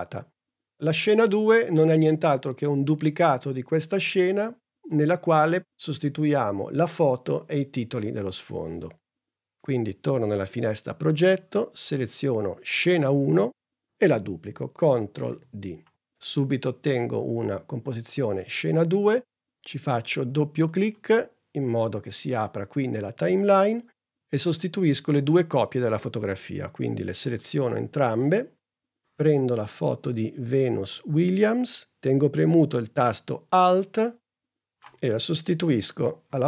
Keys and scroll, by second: 15.6 super+d.